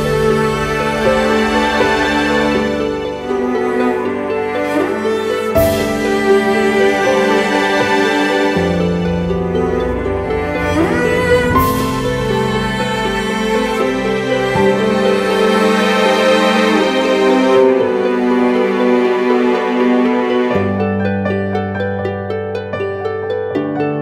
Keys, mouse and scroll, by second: 11.7 alt+click, 16.8 right click, 18.4-19.3 typing.